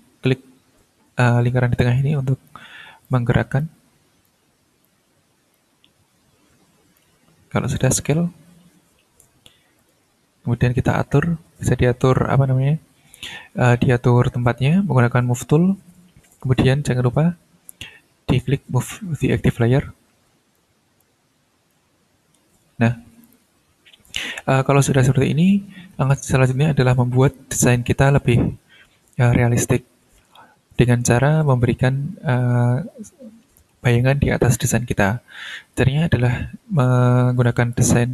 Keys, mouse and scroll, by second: 1.8 click, 3.0 click, 4.2 click, 5.5-7.1 drag, 7.7 click, 9.8 click, 10.3 ctrl+scroll up 2, 15.3 click, 18.2 click, 20.5-21.9 drag, 22.1 ctrl+scroll down 2, 23.2 click, 24.3-24.9 ctrl+scroll up 2, 24.9 ctrl+scroll down 1, 25.9 ctrl+scroll up 1, 27.4 ctrl+scroll down 1, 31.6-31.9 ctrl+scroll up 2, 36.8 click.